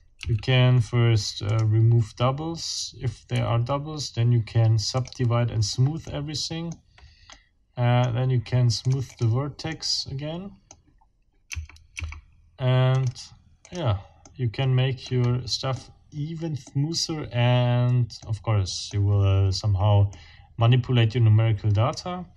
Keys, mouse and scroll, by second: 0.2 w, 1.5 click, 3.3 w, 4.9 click, 6.1 middle click, 7.3 middle click, 8.8 click, 9.7 click, 10.8 middle click, 11.6 Tab, 12.9 click, 13.6 click, 14.2-15.2 middle drag, 15.2 scroll up 1, 15.7 scroll up 1, 17.2 scroll down 2, 18.2 middle click, 20.1-22.3 middle drag.